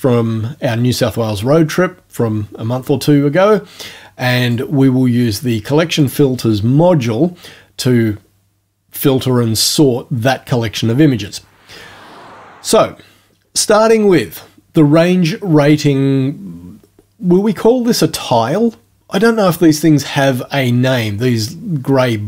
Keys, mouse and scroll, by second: 4.4 click, 6.0 click.